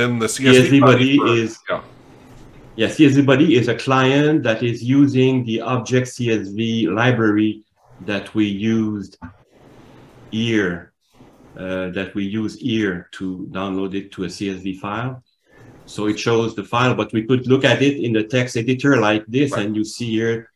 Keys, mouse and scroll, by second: 2.0 click, 8.0 alt+Tab, 8.2 alt+Tab, 8.5 alt+Tab, 10.9-11.4 scroll down 4, 11.4 scroll up 3, 12.4 click, 12.6 click, 15.0 alt+Tab, 17.0 alt+Tab, 20.3 click.